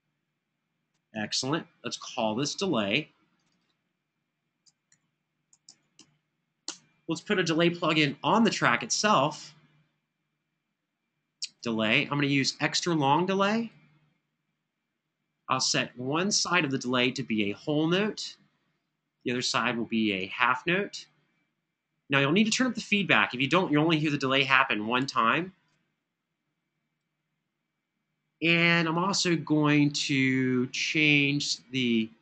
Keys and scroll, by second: 4.4-6.2 typing, 6.4 Return.